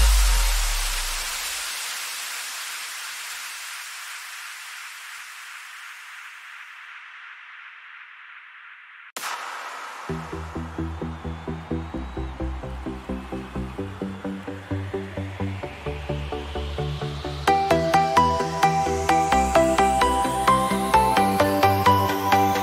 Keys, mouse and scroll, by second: 2.9 click, 10.4 click, 14.1 Return, 16.1 click, 18.0 click, 20.4 Return.